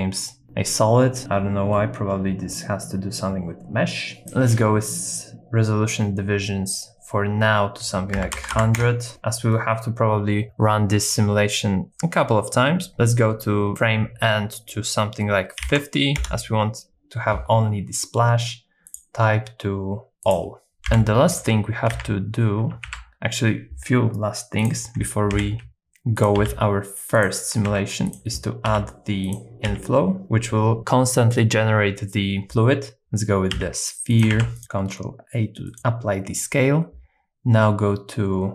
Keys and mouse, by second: 4.2-9.0 drag, 8.5 KP_0, 11.9-16.4 drag, 18.9-20.4 drag, 20.9 KP_3, 22.0 alt+z, 22.8 shift+a, 25.3 s, 26.2 click, 26.5 g, 27.2 click, 27.7 ctrl+a, 28.7 g, 29.3 click, 29.7 s, 33.6 s, 34.1 click, 34.3 ctrl+a, 35.8-38.5 drag.